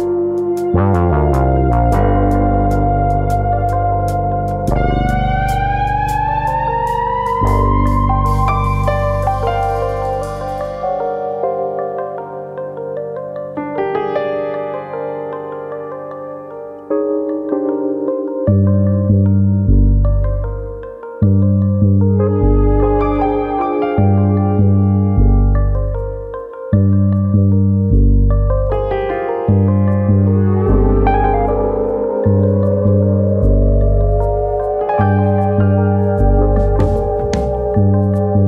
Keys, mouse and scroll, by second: 2.2 click, 2.5 middle click, 2.8-3.4 scroll up 1, 3.4 click, 4.5 middle click, 5.5 g, 6.5 click, 6.8 click, 7.0 g, 8.1 click, 9.1 click, 9.8 g, 10.6 click, 10.9-11.5 scroll down 1, 15.5 click, 16.7 ctrl+KP_Add, 17.3 KP_3, 18.1 shift+middle click, 19.8 click, 21.9 click, 23.4 e, 24.5 click, 24.8 middle click, 25.1-25.7 scroll up 1, 25.9 alt+click, 25.9 scroll up 1, 26.3 s, 27.3 click, 27.8 ctrl+z, 28.6 click, 29.2 ctrl+KP_Add, 29.5 ctrl+KP_Add, 30.3 s, 31.2 click, 31.4 middle click, 32.4 click, 35.1 click, 35.8 ctrl+KP_Add, 36.4 KP_3, 37.0-37.6 scroll down 5, 37.5 shift+middle click.